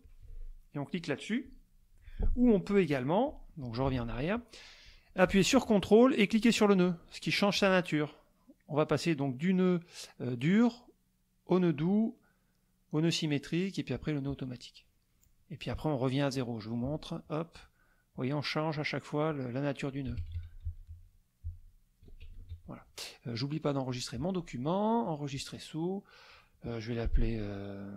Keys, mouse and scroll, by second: 1.4 click, 3.8 ctrl+z, 6.3 ctrl+click, 17.2 ctrl+click, 18.1 ctrl+click, 18.7 ctrl+click, 19.3 ctrl+click, 20.1 ctrl+z, 22.3 ctrl+shift+z, 23.9 click, 25.0 click.